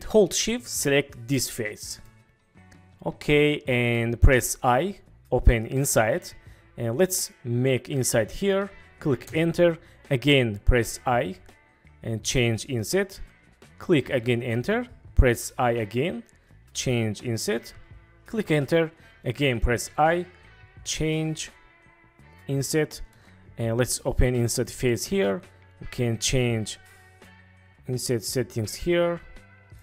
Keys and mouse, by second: 1.4 shift+middle click, 2.0-4.0 middle drag, 4.7 i, 9.2 Return, 11.0 i, 14.3 Return, 15.6 i, 18.3 Return, 19.8 i, 23.0 Return, 24.5 Return, 24.5 click, 27.2-29.8 drag.